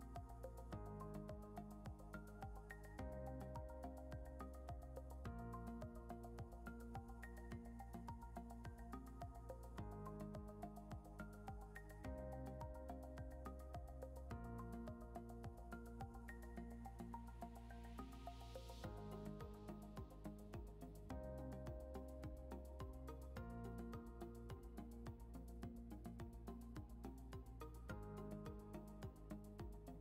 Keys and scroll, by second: 2.4 3, 3.8 c, 5.7 3, 7.2 3, 8.6 3, 10.6 3, 11.9 e, 13.1 3, 15.4 3, 15.8 ctrl+z, 17.9 ctrl+z, 20.1 3, 21.5 3, 22.2 ctrl+z, 23.9 3, 26.2 3, 27.7 3.